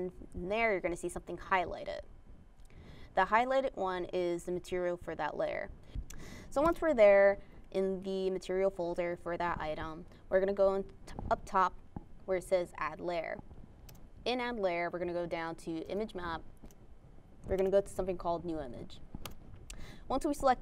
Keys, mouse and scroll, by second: 3.2 click, 3.7 click, 10.9 click, 12.0 click, 15.5 click, 17.5 scroll up 2, 19.5 click.